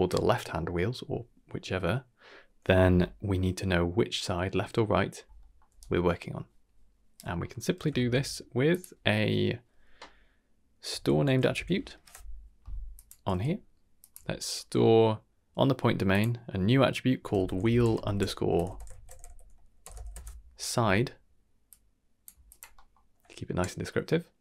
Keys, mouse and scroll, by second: 3.0 middle click, 5.4 middle click, 5.6 d, 5.8-7.1 right drag, 7.1 d, 7.3 scroll down 1, 7.5 middle click, 7.9 shift+a, 14.2 middle click, 14.6-16.1 scroll up 1, 16.1-20.1 drag, 16.1-16.4 scroll up 1, 17.6 e, 18.6 BackSpace, 21.6 click, 22.4 click, 22.7 middle click.